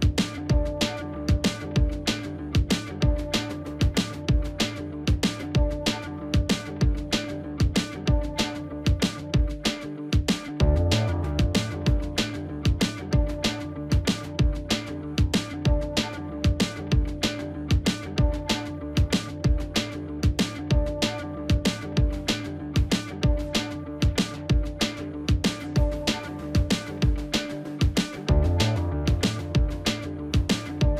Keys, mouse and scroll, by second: 3.7 2, 4.9 0, 9.7 ctrl+z, 12.0 double click, 12.1 double click.